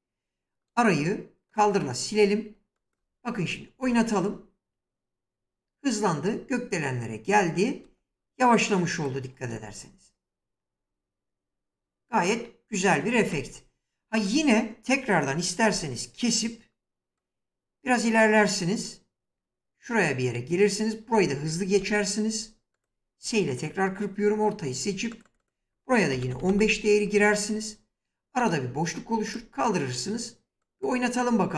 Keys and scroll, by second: 3.5 space, 7.5 space, 13.0 space, 15.4 s, 21.4 s, 25.6-26.5 typing, 31.3 space.